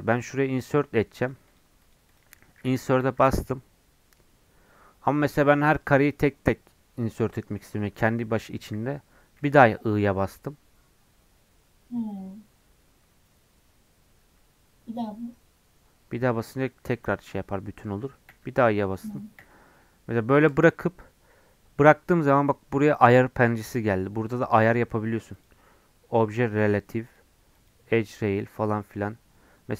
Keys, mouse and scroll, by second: 3.0 typing, 22.9-29.7 drag.